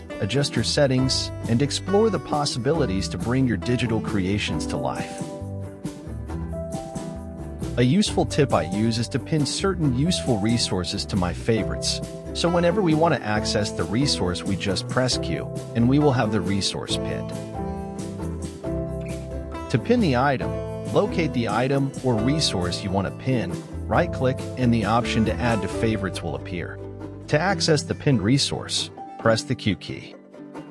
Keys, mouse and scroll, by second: 0.0 click, 0.4 ctrl+z, 0.7 click, 1.5 ctrl+z, 1.6 ctrl+z, 1.9 click, 2.6 ctrl+z, 2.9 click, 3.4 KP_1, 3.6 click, 4.3 ctrl+z, 4.5 click, 5.1 ctrl+z, 5.4 click, 6.0 ctrl+z, 6.3 click, 6.9 ctrl+z, 7.2 Escape, 10.5 Tab, 13.2-16.3 drag, 27.4 q.